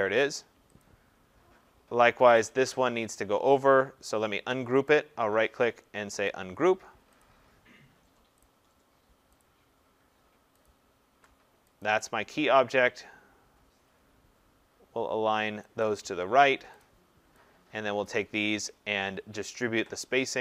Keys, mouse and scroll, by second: 0.8 click, 2.5 click, 4.9 right click, 6.3 click, 7.2 click, 8.4 click, 9.4 click, 10.7 shift+click, 11.8 click, 15.8 click, 16.8 click, 18.1 click.